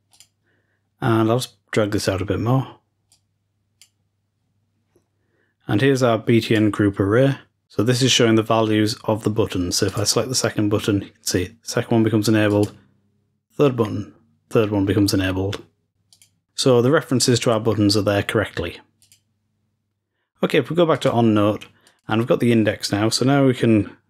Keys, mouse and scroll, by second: 0.0 click, 3.0-4.3 drag, 6.5-7.4 drag, 9.8-12.4 drag, 12.4 click, 16.0 click, 18.9 click, 20.8-22.9 drag.